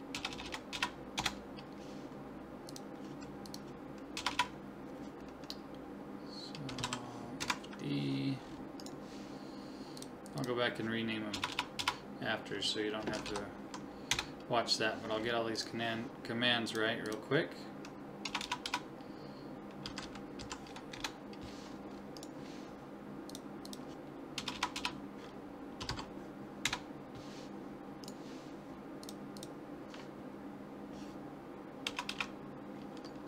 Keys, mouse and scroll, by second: 0.3 BackSpace, 0.4 BackSpace, 2.7-4.3 drag, 4.3 BackSpace, 8.8 right click, 10.0-11.5 drag, 11.5 BackSpace, 15.6-18.4 drag, 16.7 right click, 18.4 BackSpace, 22.2 right click, 23.3-24.5 drag, 24.5 BackSpace, 29.0-30.7 drag, 29.0 right click, 32.1 BackSpace.